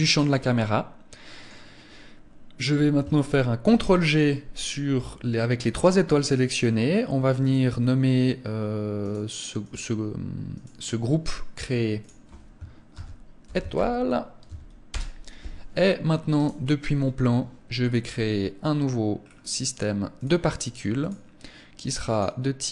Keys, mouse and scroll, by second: 2.9 ctrl+g, 6.7 click, 9.8 click, 11.3 click, 15.7 right click, 18.3 scroll down 4, 19.5 click.